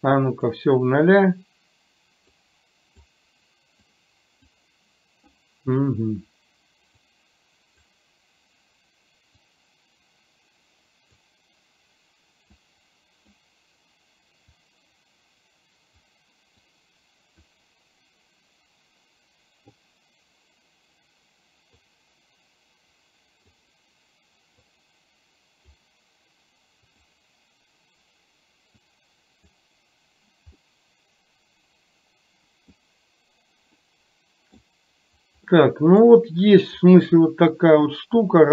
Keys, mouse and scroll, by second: 0.1 click, 2.5 click, 3.8 click, 7.2 click, 9.5-11.3 drag, 12.7 click, 14.6-16.2 drag, 16.7 click, 22.0-23.7 drag, 24.7-25.8 drag, 27.0 click, 29.0 click, 30.7-33.0 middle drag, 34.0-34.7 middle drag, 35.6-36.1 middle drag.